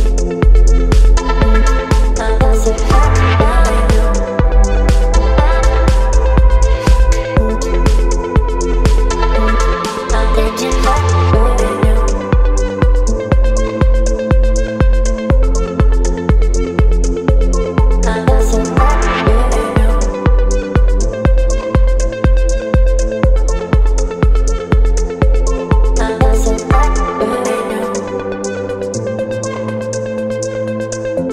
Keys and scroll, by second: 2.5 x, 4.9 space, 6.3 [, 9.8 [, 11.2 space, 12.2 space, 15.5 space, 18.6 space, 21.6 space, 25.8 space.